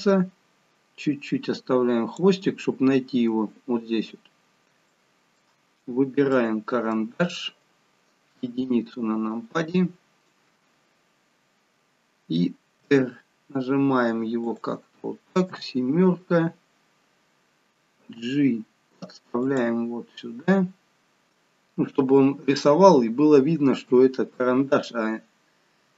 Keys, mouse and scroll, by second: 2.5 scroll up 4, 4.9 shift+middle click, 6.3 middle click, 8.3 KP_1, 9.5-10.1 scroll down 5, 12.8 r, 15.5 KP_7, 18.0 g, 20.1 scroll up 4, 23.9 KP_1, 25.3-25.9 scroll down 3.